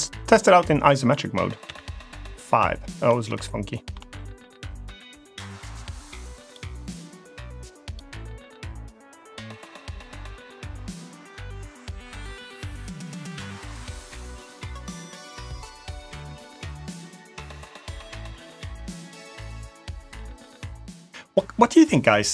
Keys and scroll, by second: 1.5 KP_5.